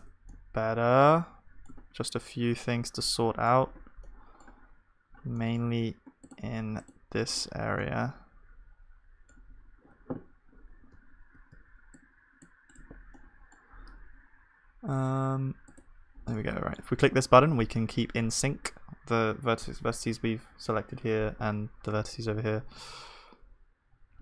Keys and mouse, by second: 0.0 Tab, 0.3-24.2 middle drag, 1.7 Tab.